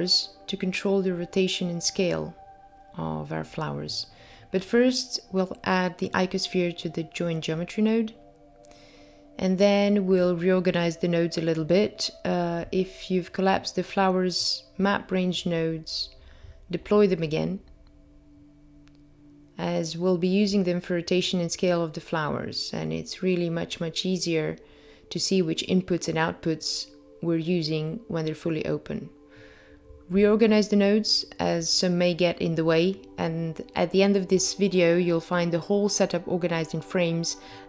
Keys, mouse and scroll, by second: 0.6 middle click, 2.4-3.7 scroll up 5, 3.1 middle click, 3.7-4.2 scroll up 1, 4.6-5.3 scroll down 5, 5.3 middle click, 6.5 middle click, 7.4-7.9 scroll up 4, 7.9 middle click, 9.5 click, 17.0 shift+right click, 18.6 click, 19.2 g, 21.6 middle click, 23.1 middle click, 24.4 click, 25.3 click, 26.2 click, 28.6 click, 33.6 click.